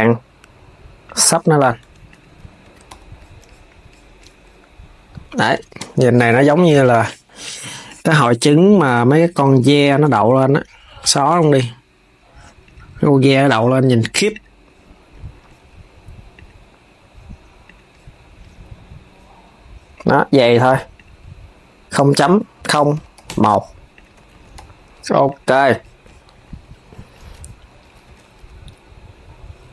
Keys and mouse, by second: 0.9 right click, 1.5 Tab, 1.8 click, 2.1 s, 2.4 s, 2.6 KP_3, 5.5 KP_3, 9.6 click, 10.7 x, 12.3 click, 14.0 click, 16.0 click, 17.3 click, 20.7-23.7 drag, 23.9 s, 24.3 KP_3, 25.0 click, 27.6 s, 28.2 s.